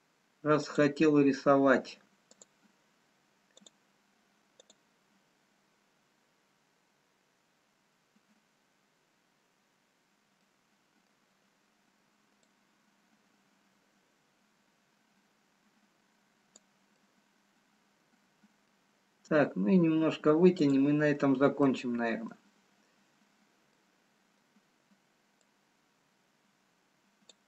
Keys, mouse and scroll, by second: 2.8 click, 11.3 middle click, 11.8-12.3 scroll up 3, 12.5 click, 18.3 middle click, 19.6-20.3 scroll down 1, 21.0 click, 22.5 middle click, 22.5-22.9 scroll down 1, 23.6-24.1 scroll down 1, 24.1 middle click, 25.7 click.